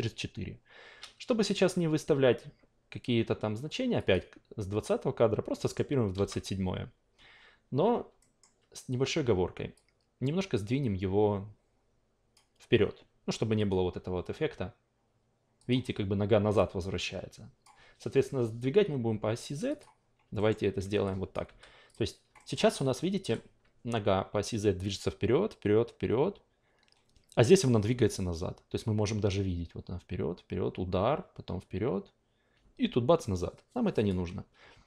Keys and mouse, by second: 4.0-5.6 drag, 5.6-7.1 middle drag, 8.2 alt+middle click, 9.7-12.3 drag, 13.6 click, 15.6 click, 17.6 click, 19.7 click, 20.3 alt+middle click, 21.0 click, 22.4 alt+middle click, 22.7 alt+right click, 29.0-34.8 drag.